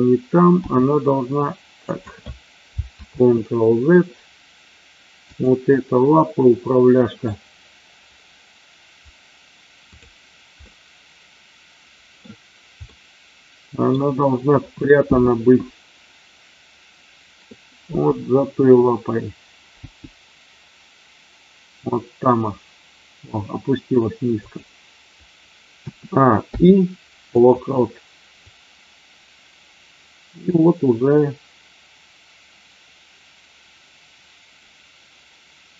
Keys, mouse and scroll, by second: 0.5 g, 1.7 click, 3.1 ctrl+z, 5.3-5.9 drag, 6.7 middle click, 9.8 click, 10.7-12.2 middle drag, 12.8-13.9 middle drag, 17.8 g, 19.8 g, 24.4 click, 25.8 a, 26.5 i, 28.5-35.7 drag.